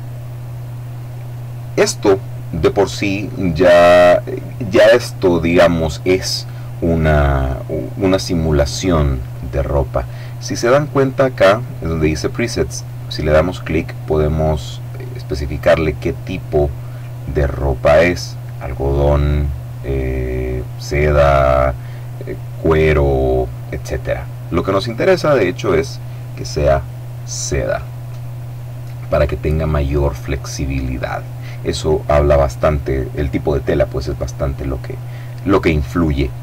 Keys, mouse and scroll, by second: 12.6 click, 25.0 click.